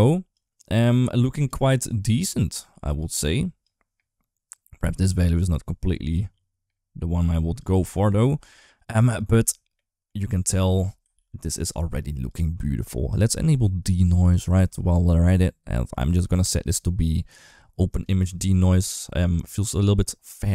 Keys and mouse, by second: 0.1-1.3 drag, 1.6 click, 2.3 click, 3.4-4.6 drag, 5.0 click, 9.6 middle click, 10.3 shift+middle click, 11.4 ctrl+s, 13.7 click, 14.1 click, 16.5-17.8 drag, 20.3 ctrl+s.